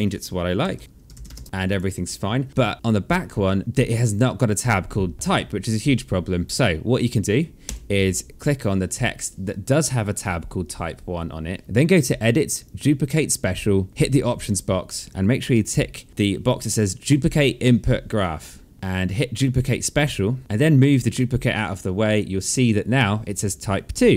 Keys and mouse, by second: 0.3-1.7 typing, 1.4 click, 2.4 alt+middle click, 2.8 click, 7.4 Delete, 8.1 click, 9.4 click, 12.4 click, 19.4 click, 20.6 click.